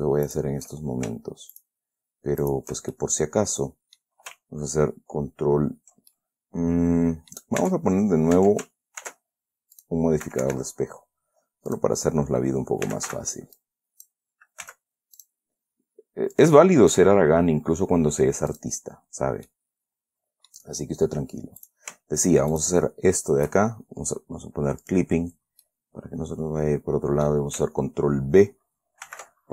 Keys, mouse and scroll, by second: 0.6 shift+click, 1.9 shift+click, 2.8 shift+right click, 3.3-4.5 shift+middle drag, 6.5-7.9 ctrl+drag, 7.9 Tab, 8.7 Tab, 9.4 ctrl+r, 10.1 click, 10.6 Escape, 12.1 click, 13.0-13.9 typing, 13.9 click, 15.0 x, 15.5 click, 16.7 click, 18.9 click, 19.8-21.0 middle drag, 22.0 click, 22.9 shift+click, 25.2 click, 26.0-27.8 middle drag, 29.4 ctrl+b.